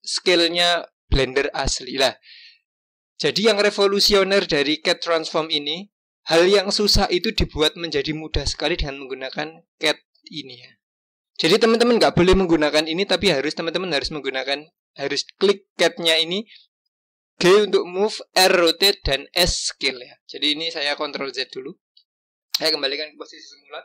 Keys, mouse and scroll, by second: 7.3 click, 8.8-11.9 drag, 15.4-18.5 drag, 21.0 ctrl+z, 21.5 ctrl+z, 22.0 ctrl+z, 23.0 click.